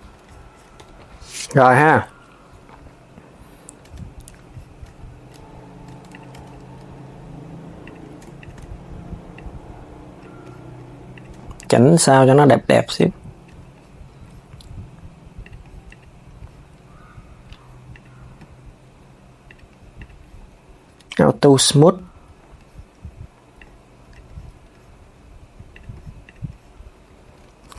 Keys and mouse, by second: 0.5 KP_3, 4.5 Tab, 5.6 Tab, 5.8 click, 6.0 Tab, 7.5 click, 8.1 shift+click, 9.0 click, 10.8 click, 11.2 shift+click, 12.5 click, 13.2 Tab, 15.1 click, 15.6 click, 17.6 click, 18.5-19.7 right drag, 19.7 click, 20.9 s, 23.3 click, 25.4 click, 25.9 click, 26.8 s.